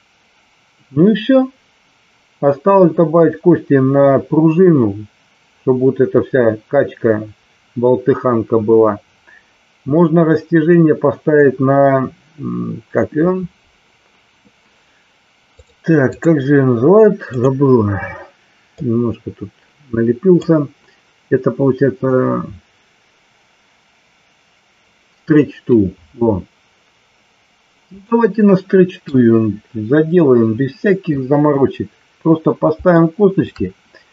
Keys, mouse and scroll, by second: 15.6 click, 18.9-20.4 drag, 28.0-29.0 shift+middle drag, 32.9-33.4 shift+middle drag.